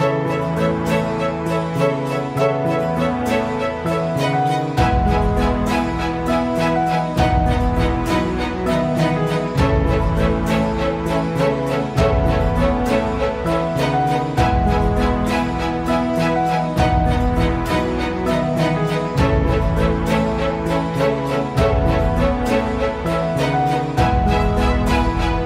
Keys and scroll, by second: 3.8 Escape, 18.9 F8.